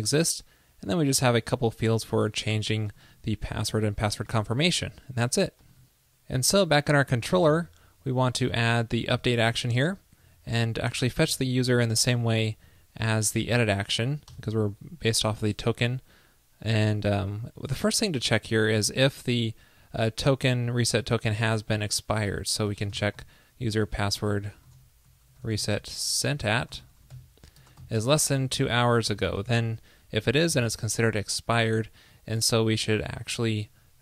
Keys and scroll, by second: 11.0 shift+super+Right, 11.1 super+c, 12.2 super+v.